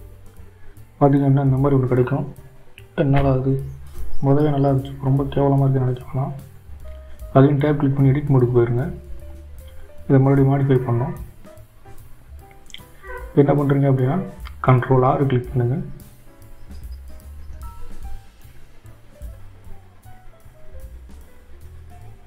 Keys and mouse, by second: 5.4-6.6 right drag, 9.6-11.7 drag, 13.1 Tab.